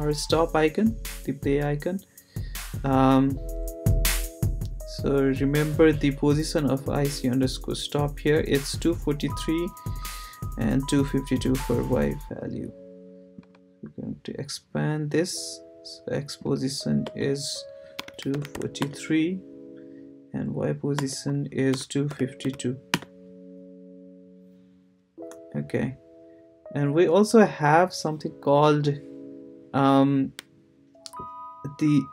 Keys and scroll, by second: 17.0 Return, 17.7-19.0 typing, 20.9 Return, 21.5-22.9 typing.